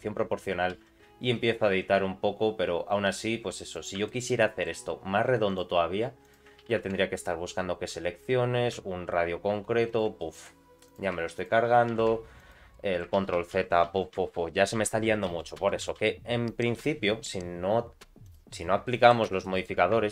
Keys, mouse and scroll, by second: 0.7 g, 4.0 shift+middle click, 4.4 middle click, 5.5 click, 6.2 shift+click, 6.7 g, 10.2 middle click, 10.9 click, 11.4 shift+click, 11.9 g, 12.7 middle click, 13.2 ctrl+z, 13.4-15.9 ctrl+z, 18.2 click, 18.8 middle click, 19.2 Tab, 19.4 middle click, 20.0 ctrl+r.